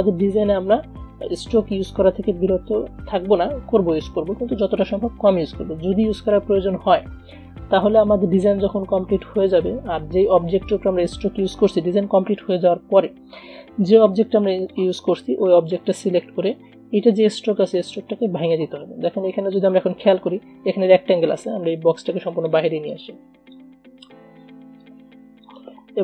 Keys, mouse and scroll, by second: 8.6-14.4 drag, 14.4-19.7 drag, 22.0 space, 22.2 click, 22.4 space, 23.0-26.0 drag.